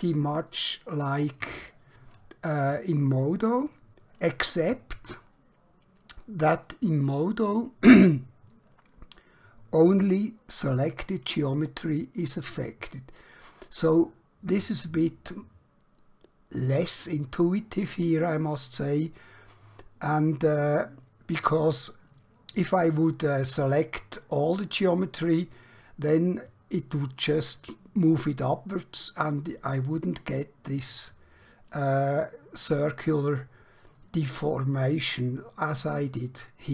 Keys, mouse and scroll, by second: 0.6 shift+middle click, 1.9 middle click, 34.1 middle click.